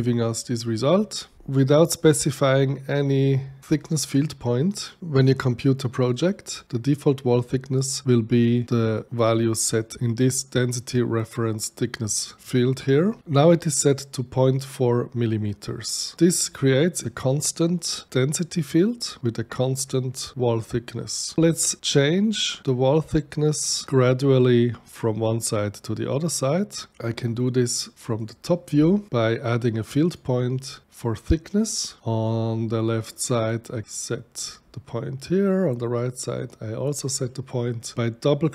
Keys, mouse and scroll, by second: 3.8 click, 6.1 click, 8.4 click, 8.6 click, 26.9 click, 28.0 click, 28.7-29.8 middle drag, 29.8 click, 31.6 click, 33.1 click, 35.9 click, 36.9 right click, 38.4 click.